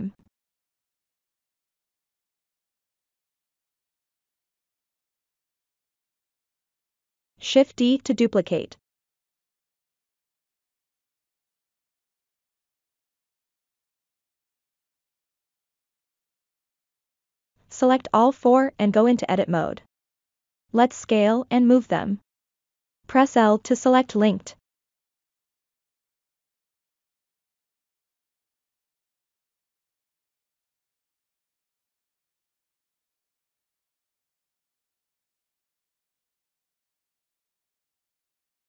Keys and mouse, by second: 2.0 click, 3.3 click, 5.9-7.2 drag, 8.2 shift+d, 10.0 shift+d, 11.5 shift+d, 15.5-16.2 drag, 18.2 Tab, 19.0 click, 20.7 l, 21.5-23.2 drag, 23.5 g, 23.8-24.8 drag, 25.5 click, 25.9 click, 28.5 a, 30.2 l, 30.8 s, 31.3-33.9 drag, 35.4 click, 36.3 g, 36.9 click, 38.4 click.